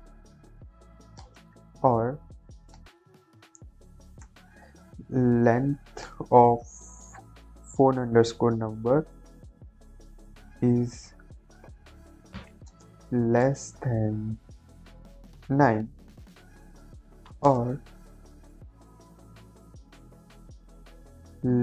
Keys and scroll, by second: 1.1 space, 1.5 o, 1.8 r, 2.7 space, 4.1 l, 4.5 e, 5.6 Down, 6.0 Return, 6.7-8.7 typing, 7.2 Left, 9.2 Return, 10.1 Right, 12.6 space, 12.9 shift+,, 13.3 space, 15.4 9, 16.5 space, 17.0 o, 17.1 r, 17.3 space, 18.8 shift+9, 19.0 shift+0, 19.5 Left, 20.5 Left, 21.1 l, 21.2 e, 21.4 n.